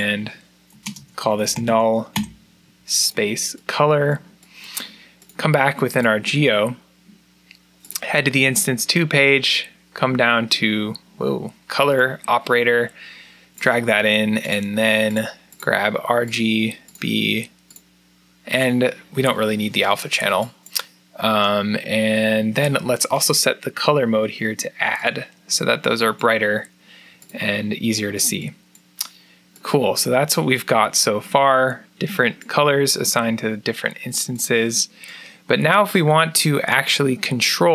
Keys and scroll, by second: 0.5-2.0 typing, 2.1 Return.